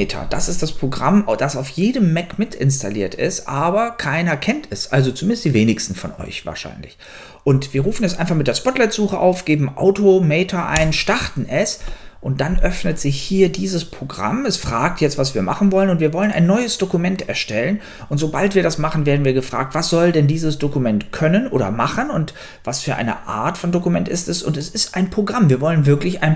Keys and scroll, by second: 0.0-0.4 typing, 10.8 Return.